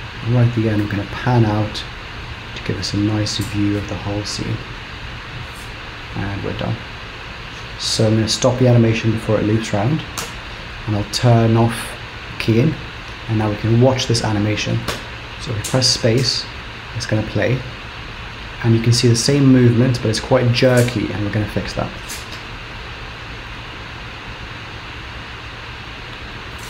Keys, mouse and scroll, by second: 8.0 space, 8.1 b, 10.4 shift+Left, 11.6 click, 14.9 space, 22.5 space, 24.3 click.